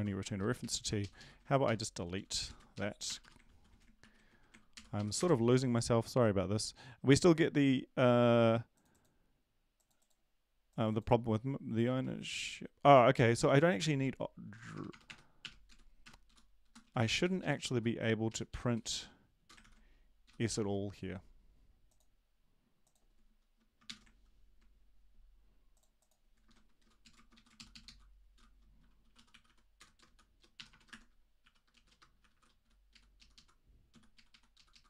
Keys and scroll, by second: 1.0 Right, 1.0 ctrl+shift+Left, 1.2 ctrl+shift+Left, 1.6 BackSpace, 2.1 Down, 2.3 Down, 2.4 Down, 2.7 shift+Up, 3.0 BackSpace, 3.4 BackSpace, 4.7 Down, 4.7 ctrl+s, 5.2 Down, 11.9 ctrl+`, 14.4 shift+Home, 14.7-16.0 typing, 15.6 Down, 16.2 Down, 16.6 Up, 16.8 Down, 17.0 Down, 17.1 Down, 17.4 Up, 17.7 Up, 18.2 Right, 18.5 End, 18.7 Return, 19.6 Return, 19.6 ctrl+v, 23.8 shift+Home, 27.3 Down, 27.3 Up, 27.8 shift+Left, 28.3 shift+Home, 29.1-32.3 typing, 32.9 Right, 33.9 Left, 33.9 s, 34.1 Right, 34.3 Right, 34.5 Left, 34.7 Left.